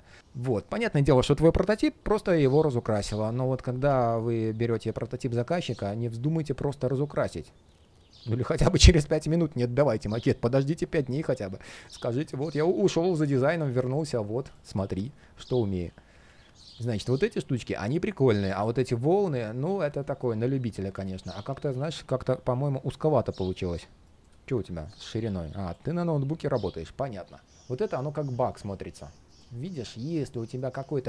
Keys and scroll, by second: 21.0 ctrl+shift+3, 21.2 ctrl+shift+3, 24.5 super+\.